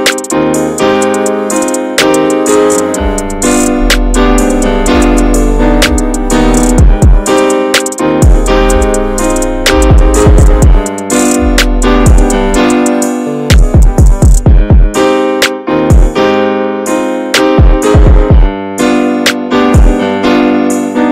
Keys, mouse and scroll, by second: 1.8 scroll down 2, 2.0 middle click, 2.5 scroll down 1, 2.7 shift+middle click, 3.0-3.3 shift+scroll up 1, 3.3 middle click, 3.6-4.1 scroll up 2, 3.7 shift+middle click, 4.8-7.6 drag, 7.6-8.6 scroll down 3, 8.6 ctrl+z, 8.8 scroll up 2, 9.2-10.2 shift+middle drag, 10.2-14.8 drag, 14.8 ctrl+z, 14.8 middle click, 15.1-15.8 scroll up 1, 15.8 scroll up 1, 15.8-17.1 drag, 17.1-17.5 scroll down 10, 17.5-20.2 middle drag, 20.2-20.7 scroll up 3, 20.7-21.1 middle drag.